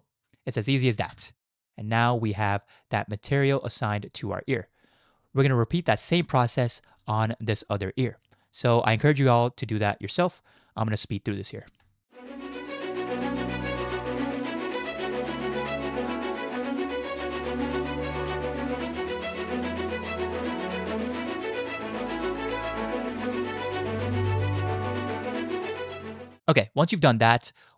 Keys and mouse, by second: 1.1 Tab, 1.6-2.0 middle drag, 2.0-4.4 drag, 4.9-6.0 middle drag, 6.6 shift+drag, 8.5-8.8 shift+drag, 9.7-11.6 middle drag, 12.1 Tab, 12.2 shift+click, 12.7 click, 13.7 shift+click, 13.8 shift+click, 14.1 alt+shift+z, 14.5 alt+shift+click, 15.3 shift+click, 15.7 shift+click, 16.0 shift+click, 16.8 shift+click, 17.3 alt+shift+click, 17.5 ctrl+z, 18.1 alt+shift+click, 19.0 shift+click, 20.4 alt+shift+click, 20.7 shift+click, 22.4 ctrl+z, 22.6 shift+middle click, 22.9 w, 24.7 middle click, 25.0 shift+middle click, 25.4 middle click, 25.6 z.